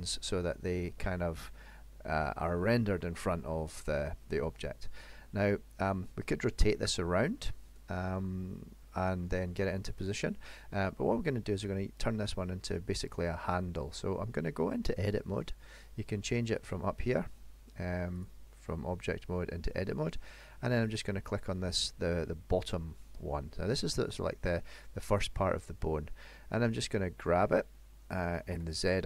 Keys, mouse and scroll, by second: 0.6 middle click, 7.6-8.9 scroll up 5, 9.0 shift+middle click, 12.8 middle click, 13.6-14.3 scroll down 2, 14.3 scroll down 1, 16.5 click, 20.9 click, 22.1-22.4 scroll up 1, 27.5 g.